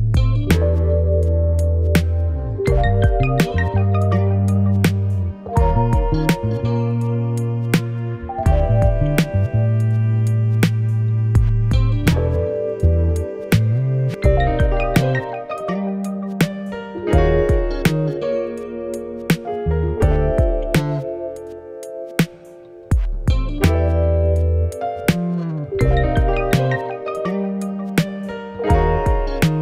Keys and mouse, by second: 0.4 middle click, 1.3 middle click, 1.8 middle click, 2.3 middle click, 2.5 /, 2.6 shift+middle click, 4.0 shift+click, 4.2 click, 4.5 click, 5.0 click, 5.4 click, 5.6 click, 5.8 /, 6.1 Tab, 6.7 click, 8.2 click, 8.4 click, 8.7 click, 9.9 click, 10.3 click, 10.6 click, 10.9 shift+middle drag, 11.4 middle click, 11.6 middle click, 11.9 shift+middle click, 14.4 middle click, 14.6 middle click, 14.9 shift+middle click, 15.1 middle click, 15.6 alt+Tab, 16.0 alt+shift+click, 16.6 middle click, 17.0 middle click, 17.3 click, 20.1 shift+middle click, 21.2 middle click, 22.2 middle click, 23.4 shift+middle drag, 23.8 shift+middle drag, 24.1 middle click, 24.5 click, 25.2 drag, 25.6 click, 27.4 click.